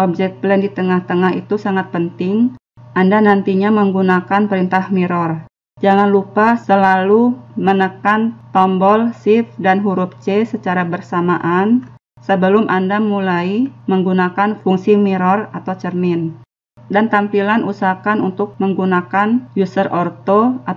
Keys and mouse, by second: 0.0 middle click.